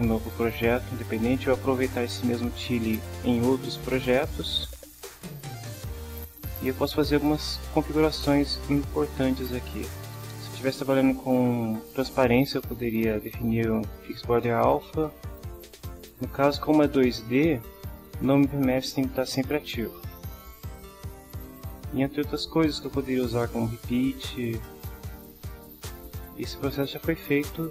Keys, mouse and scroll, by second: 16.4-18.1 drag, 21.3-22.1 drag.